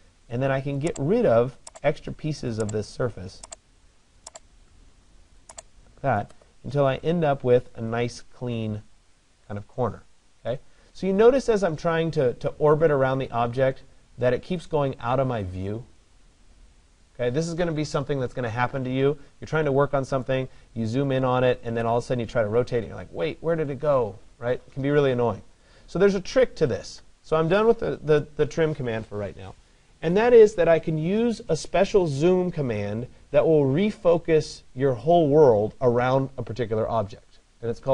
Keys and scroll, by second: 27.7 Return.